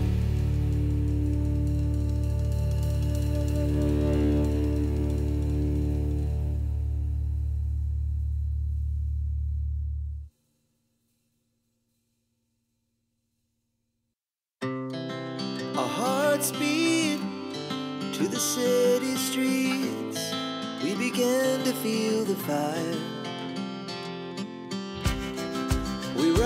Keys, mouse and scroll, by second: 3.9 click, 5.7 click, 7.7 click, 8.9 click, 9.9 click, 11.6 click, 12.6 click, 14.8 click, 15.7 click, 17.1 click, 19.0 click, 21.2 click, 22.8-24.1 drag, 25.2 click.